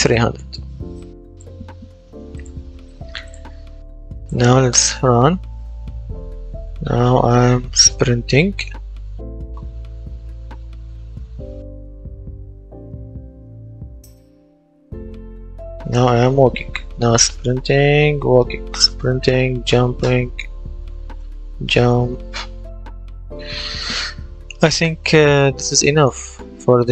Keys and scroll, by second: 4.4 w, 19.4 shift+space, 21.0 shift+space, 23.2 Escape.